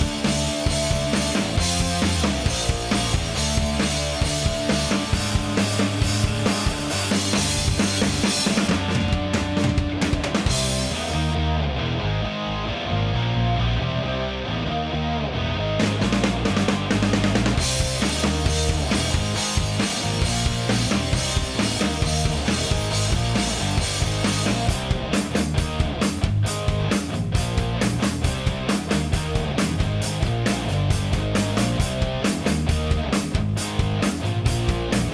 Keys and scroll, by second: 1.3 Escape, 10.4 Escape, 15.8 Escape, 21.0 u, 25.6 Escape.